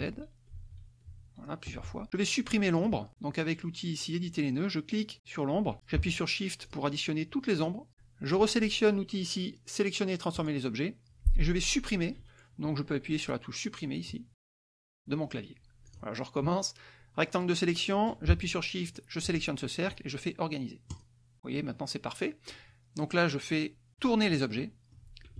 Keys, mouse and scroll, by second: 1.0 ctrl+z, 3.0 click, 3.9 click, 6.1 click, 8.2 shift+click, 11.1 click, 16.0 Delete, 17.5 click, 18.0-19.2 drag, 20.5 shift+click, 22.1 click.